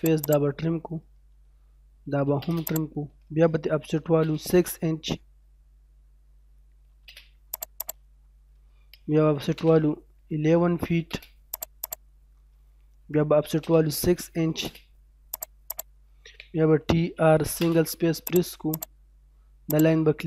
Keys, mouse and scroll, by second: 0.0 click, 1.7-2.6 typing, 2.7 click, 4.1 o, 4.1 space, 6.8 6, 7.0 space, 7.5 click, 8.2 middle click, 9.2-11.1 typing, 11.5 click, 12.2-13.3 scroll down 1, 13.3 o, 13.5 space, 14.3 6, 14.5 space, 15.3 click, 16.4-17.5 typing, 18.3 click.